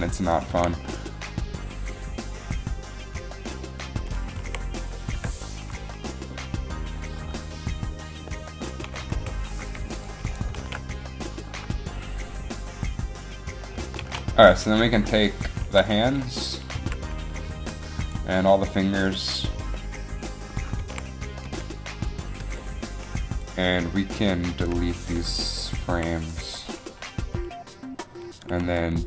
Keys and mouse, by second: 0.6 a, 3.3 r, 3.3 a, 4.5 a, 5.2 i, 5.9 i, 9.0 Right, 10.7 alt+a, 14.2 alt+a, 15.8 a, 16.1 click, 16.9 alt+a, 16.9 z, 17.6 c, 21.0 a, 21.6 b, 22.5 b, 24.1 a, 24.1 z, 24.1 c, 26.0 Delete, 26.6 Delete, 28.8 b.